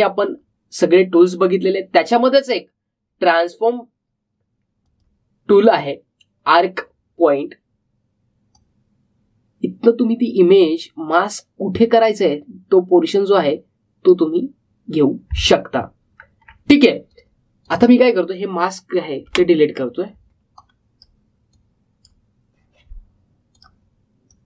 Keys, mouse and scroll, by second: 4.2 click, 9.5-16.5 drag, 16.5 alt+scroll up 1, 17.4-18.0 alt+scroll down 1, 18.0 click, 21.5-24.4 drag.